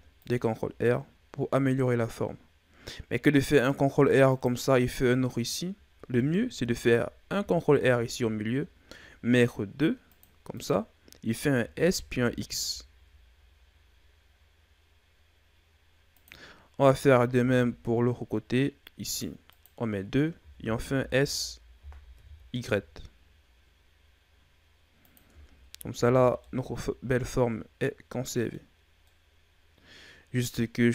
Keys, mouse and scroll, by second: 6.0 ctrl+z, 7.3 ctrl+r, 17.3 ctrl+r, 20.3 s, 25.2 Tab, 25.9 a, 26.2 scroll down 2, 26.4-28.6 middle drag, 28.6-29.0 scroll up 2, 29.0-30.7 middle drag, 30.7 scroll up 2.